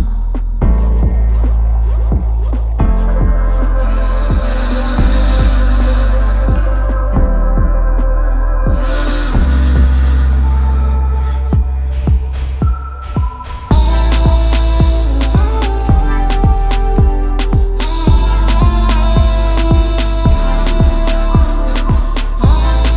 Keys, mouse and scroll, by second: 0.3 z, 0.5 middle click, 0.6 middle click, 1.5 right click, 3.3 click, 3.5 click, 4.2 click, 5.2 right click, 6.0 click, 6.7-8.4 typing, 8.0 click, 9.3 click, 10.3 right click, 10.3-11.2 typing, 11.2 click, 11.6 middle click, 12.3 z, 12.6 middle click, 13.1 z, 13.3 middle click, 13.3 middle click, 13.6 middle click, 13.8-14.2 scroll, 15.3 alt+scroll, 15.7 a, 16.1 click, 16.2-16.6 scroll, 17.6 click, 17.7-18.4 scroll, 19.0 scroll, 19.3 click, 20.2 scroll, 21.3 m, 22.5 scroll.